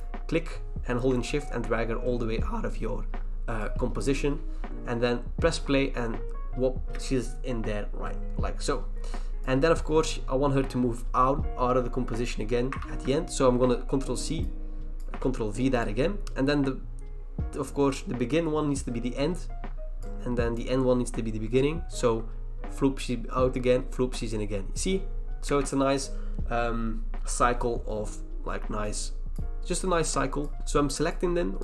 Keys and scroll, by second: 12.8 ctrl+c, 15.2 ctrl+v.